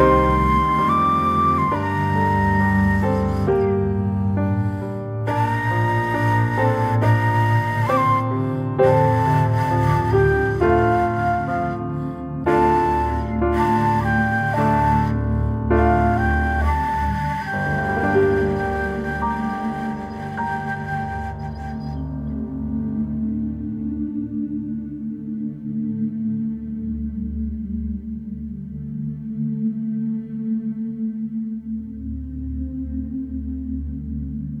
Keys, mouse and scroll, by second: 1.0-1.6 middle drag, 1.6 scroll down 2, 1.9-2.4 middle drag, 2.4 scroll down 2, 3.0 click, 3.2 scroll down 2, 3.5-5.5 middle drag, 5.5 scroll down 2, 5.8-6.6 middle drag, 6.6 shift+a, 8.8 alt+middle click, 9.1 scroll up 2, 9.3 shift+middle click, 9.7 s, 22.7 alt+middle click, 23.3 s, 27.4-27.8 scroll up 5, 27.8 shift+middle click, 28.6 g, 30.8-31.4 middle drag, 31.4 scroll down 2, 32.0-32.5 middle drag, 32.5 click, 32.8-33.1 scroll down 1, 33.1 middle click, 33.4 click, 33.7-34.6 middle drag.